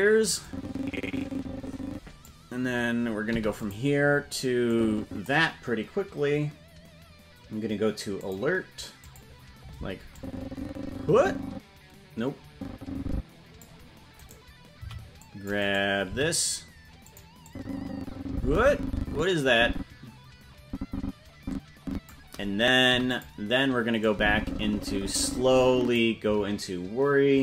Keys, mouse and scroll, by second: 0.4-2.2 drag, 3.2 i, 4.7 click, 8.2 click, 9.0 click, 10.1-13.6 drag, 14.1 right click, 14.7 c, 16.0 g, 17.4-22.1 drag, 24.1-26.0 drag.